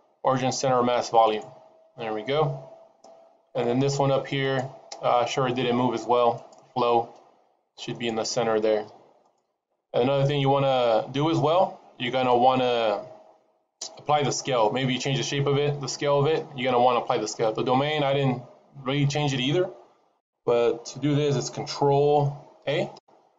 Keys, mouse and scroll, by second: 4.3 click, 6.2 click, 7.8 right click, 17.8 click, 22.5 ctrl+a.